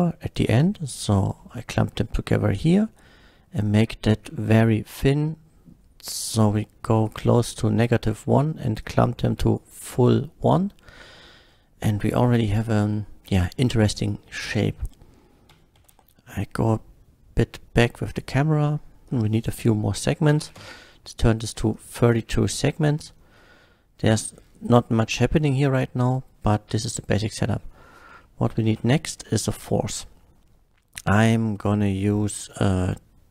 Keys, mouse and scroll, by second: 0.4 click, 1.4-2.5 middle drag, 3.7-7.0 drag, 8.8-9.6 drag, 9.8-11.2 middle drag, 11.9-12.4 scroll down 1, 12.4 KP_0, 14.0 click, 14.0 KP_0, 15.5 g, 15.7 z, 16.7 g, 16.7 z, 18.1 click, 19.1 Return, 20.4 KP_3, 20.5 Return, 20.5 KP_2, 21.7 drag, 22.1-23.4 middle drag, 24.4-25.1 scroll down 1, 25.1 middle click, 25.8-26.5 middle drag, 28.2 KP_1, 28.7 shift+a.